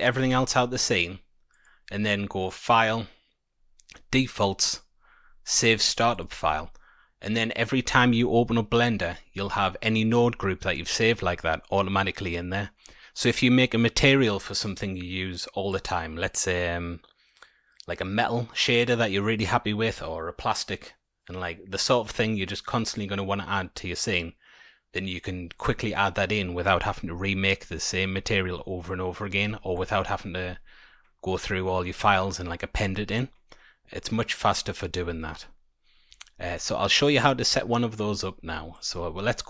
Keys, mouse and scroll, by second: 1.4 click, 6.1 click, 6.4-9.1 scroll down 8, 26.2-28.3 scroll down 2, 28.6 middle click, 29.6 shift+middle click, 35.6-36.0 scroll down 1, 36.2 shift+middle click, 36.6-37.7 scroll down 1, 37.7 middle click, 37.7-38.1 scroll down 1, 38.7 click.